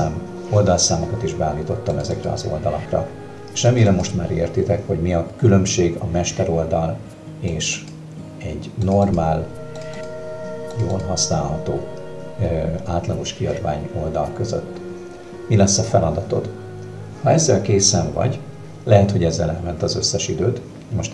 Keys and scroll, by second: 14.3 ctrl+KP_Subtract.